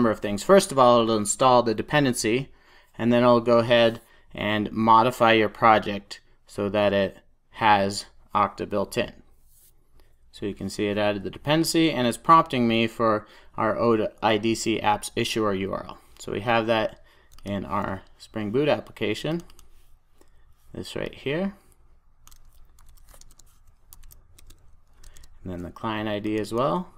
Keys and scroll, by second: 22.7 super+c, 25.0 super+c.